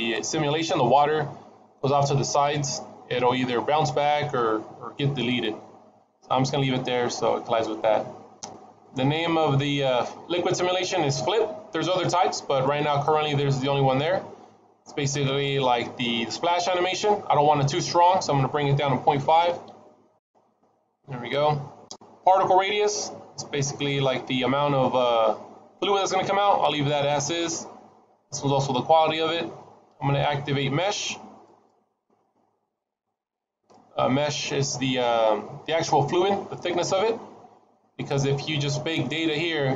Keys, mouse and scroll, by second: 6.9-9.9 scroll down 1, 11.7 click, 17.7 click, 27.1-28.9 scroll down 1, 28.9-30.9 scroll down 3, 30.9-31.5 scroll down 1, 31.5 click, 33.4 click, 36.9-38.2 scroll up 7, 38.2-39.7 scroll up 2.